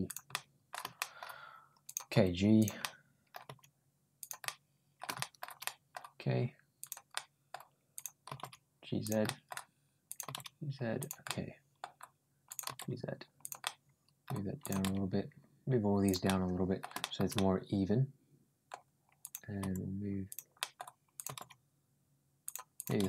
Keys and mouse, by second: 0.1 middle click, 0.8 shift+middle click, 1.7 click, 2.0 g, 2.6 middle click, 3.3 g, 4.3 middle click, 5.0 middle click, 5.5 middle click, 6.6 click, 6.9 middle click, 7.8 click, 8.1 g, 9.1 middle click, 9.9 click, 10.1 g, 11.1 middle click, 12.3 click, 12.5 g, 13.4 middle click, 14.4 click, 14.6 g, 16.1 middle click, 16.8 middle click, 17.2-18.5 middle drag, 19.0 click, 19.4 g, 20.4 middle click, 21.0 click, 21.1 g, 22.6 click.